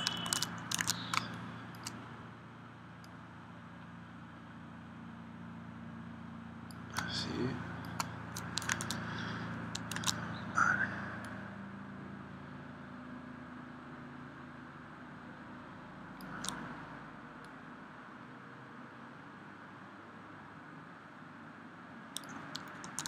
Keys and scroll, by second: 0.2 super+Tab, 0.9 super+Tab, 1.1 space, 7.1 space, 8.8 super+Tab, 10.0 super+Tab, 22.8 super+Tab.